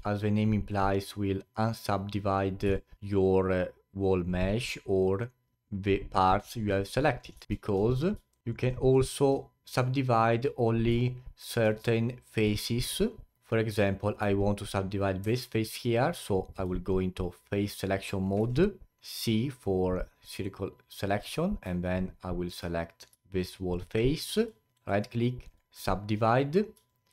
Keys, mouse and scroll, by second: 0.8-5.4 drag, 7.4 ctrl+z, 8.3-8.9 alt+drag, 8.9-11.0 alt+middle drag, 11.0-13.4 alt+drag, 13.8-15.2 alt+drag, 15.2 3, 16.2-18.4 alt+drag, 18.4 c, 21.8-24.7 alt+drag, 24.7 right click, 26.9-27.1 alt+drag.